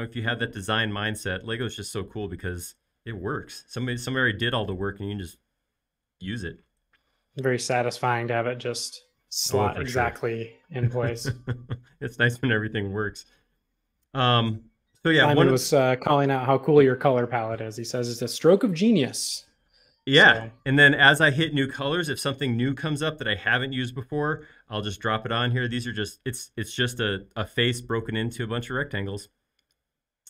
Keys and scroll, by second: 7.8 Delete, 16.0 e, 18.6 space, 20.7 typing.